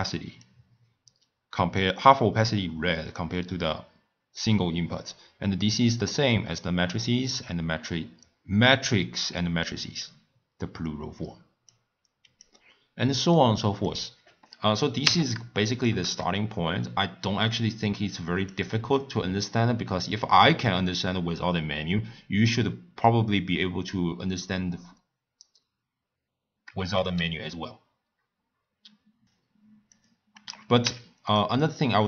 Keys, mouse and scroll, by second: 0.4 click, 5.1 scroll up 1, 5.1-8.2 middle drag, 11.7 click, 13.3 click, 15.4 x, 15.7 click, 16.0 shift+a, 27.0 shift+a, 30.8 x.